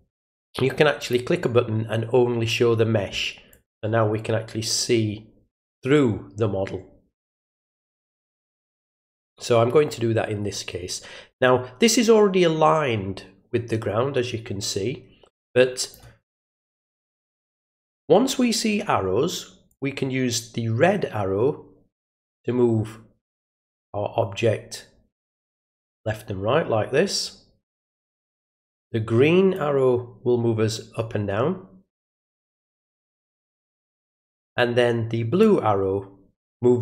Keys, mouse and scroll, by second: 1.0 click, 3.5-15.9 drag, 19.7-28.5 drag, 29.5-33.9 drag, 35.4-36.8 drag.